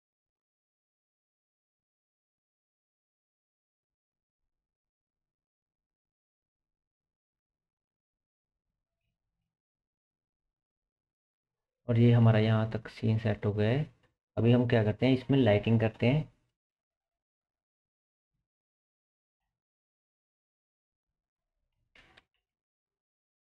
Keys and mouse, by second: 0.3 g, 5.3 g, 8.8 Tab, 15.2-16.8 middle drag, 17.2-20.5 drag, 20.5 middle click, 20.6 click, 21.2-23.5 middle drag, 22.2 KP_0.